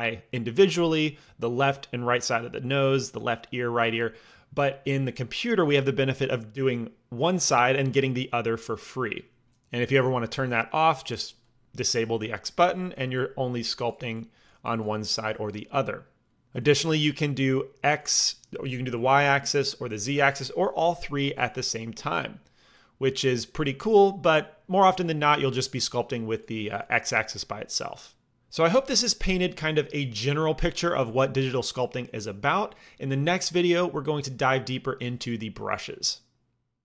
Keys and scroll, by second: 12.4 f, 21.2 f.